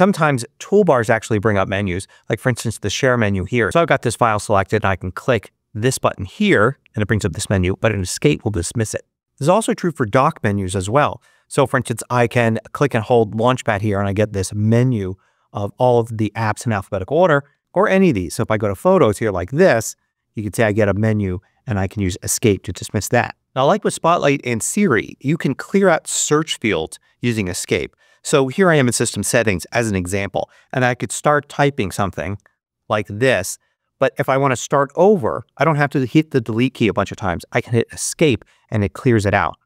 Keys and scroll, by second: 7.4 Escape, 17.4 Escape, 21.8 Escape, 30.9-32.6 typing, 38.0 Escape.